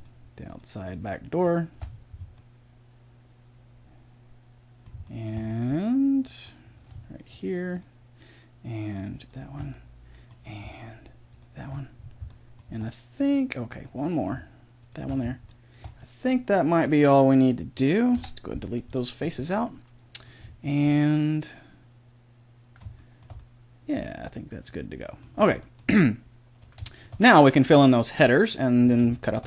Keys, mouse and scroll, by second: 1.9 right click, 2.7 click, 3.1-4.3 middle drag, 5.0-7.3 middle drag, 7.3 click, 9.8-11.3 middle drag, 12.0 right click, 12.5-14.7 middle drag, 15.1-18.1 middle drag, 18.1 Delete, 19.1 middle click, 20.9 middle click, 21.1 middle click, 21.3 middle click, 21.9 middle click, 22.9-25.3 middle drag, 25.5 middle click, 26.2 middle click, 27.0 middle click, 28.5-29.4 drag.